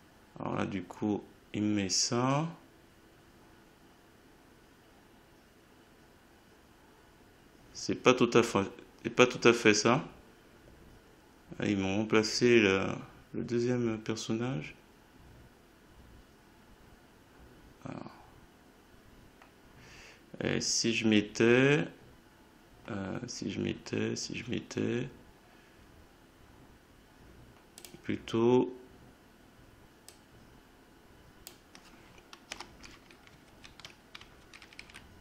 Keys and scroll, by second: 32.5 Delete, 33.4 ctrl+Right, 34.4 shift+Right.